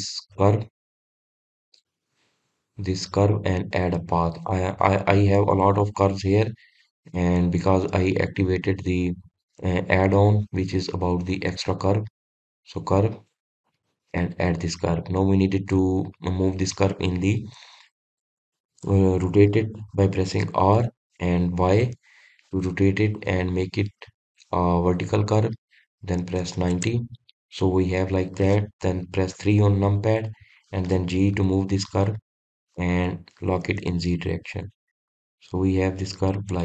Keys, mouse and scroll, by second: 15.5-16.3 scroll down 2, 16.3-16.7 scroll down 1, 16.7-18.8 scroll up 2, 18.8-20.0 scroll up 1, 28.5 scroll down 2, 30.4 KP_3, 32.4 g.